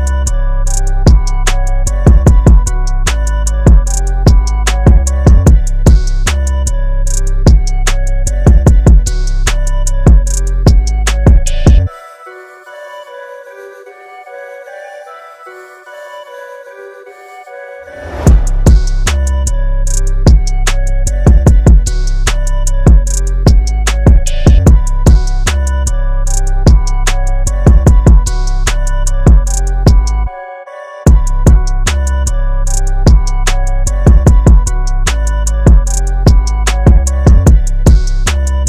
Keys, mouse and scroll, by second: 3.0-4.1 scroll up 1, 4.1 space, 4.4 click, 4.5 space, 5.3-5.9 scroll down 1, 5.9-6.2 scroll up 1, 6.3 alt+scroll down 1, 7.3 space, 7.5 click, 7.7 space, 9.4 click, 14.3 click, 21.0 click, 25.7 click, 28.1 click, 29.6 scroll up 1, 30.5 click, 34.3 click.